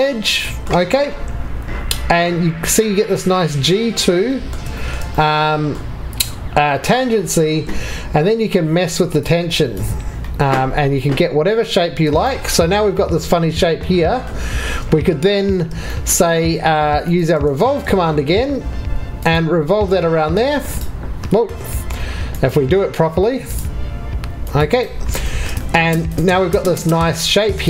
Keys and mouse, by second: 21.3 Escape, 24.4 click, 27.1 2.